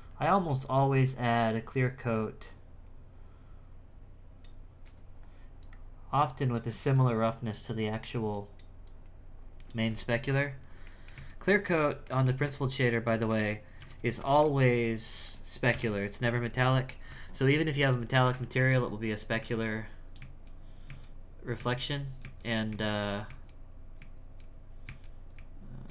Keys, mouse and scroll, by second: 2.4-5.4 drag, 5.6-8.5 drag, 8.8-10.8 drag, 10.8 middle click, 11.1 z, 11.4-12.0 scroll down 6, 12.0 middle click, 12.4 Tab, 12.8 middle click, 13.8 alt+a, 14.3 shift+middle click, 14.6-15.7 scroll up 3, 15.7 KP_1, 17.1 Tab, 18.6 z, 19.4 z, 21.0 z, 21.6 z, 22.7-25.9 typing.